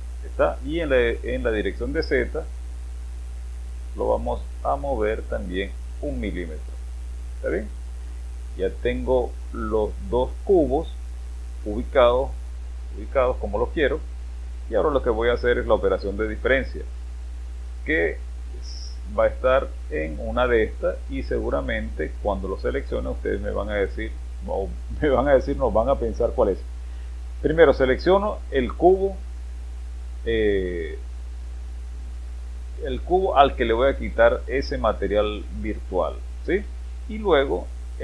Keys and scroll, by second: 0.1 space.